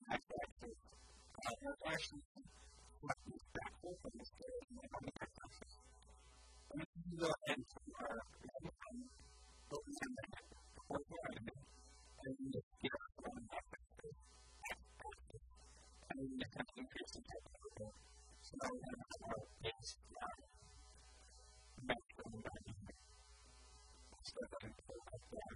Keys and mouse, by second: 1.1 ctrl+z, 1.6 a, 4.2 s, 7.7-12.6 drag, 12.1 s, 17.8-19.8 drag, 18.2 a, 18.3 Tab, 21.4 Tab, 21.7 KP_1, 22.1 KP_3, 22.3 KP_1, 23.7 a, 23.9 a, 24.1 b, 24.5 b.